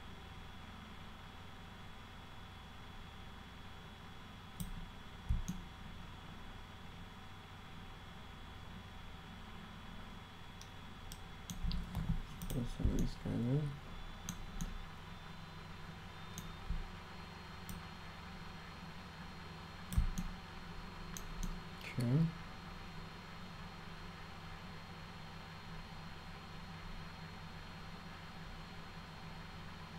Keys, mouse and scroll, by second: 5.5-11.5 alt+middle drag, 12.5 click, 13.0-14.3 alt+middle drag, 14.6-16.4 alt+middle drag, 17.7-20.0 drag, 20.2-21.2 alt+middle drag, 21.5-29.9 alt+middle drag.